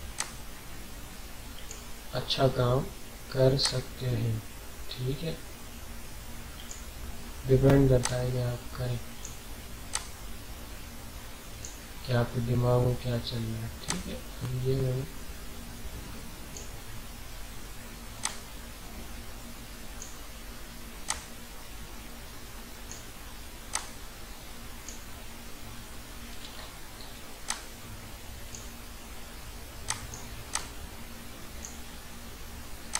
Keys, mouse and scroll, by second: 13.8-26.5 drag, 26.5 alt+scroll up 1, 27.4-32.9 drag.